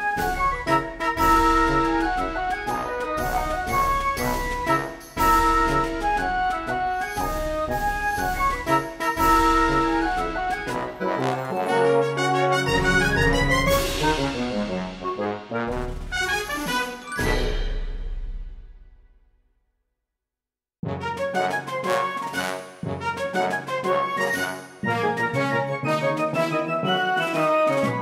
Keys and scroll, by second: 2.0 ctrl+z, 23.4 space.